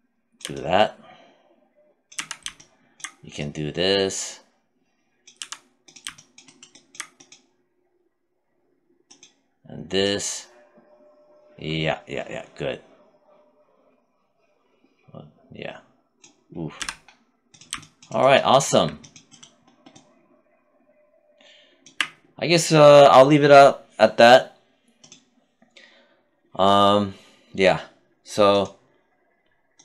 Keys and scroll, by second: 1.4 z, 4.6 z, 16.0 z.